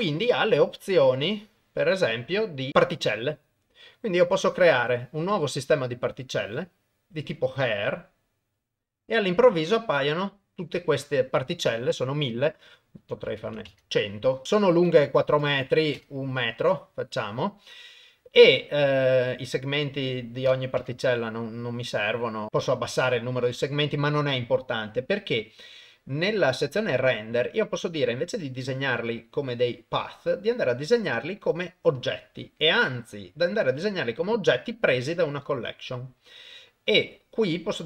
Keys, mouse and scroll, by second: 1.1 click, 2.4 click, 4.2 click, 8.8-10.5 middle drag, 12.7-13.7 drag, 13.5 KP_0, 14.2 middle click, 15.1 click, 16.4 middle click, 17.7 middle click, 19.5-20.8 drag, 26.8 click, 30.1-32.0 drag, 33.0-35.0 drag, 37.1 middle click.